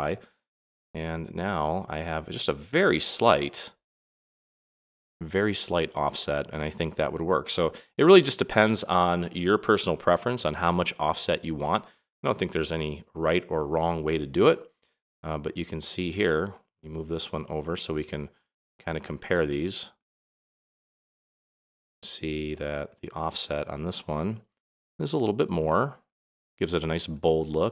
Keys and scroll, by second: 10.0 super+-, 12.3 super+=, 13.2 super+-, 16.0 super+z.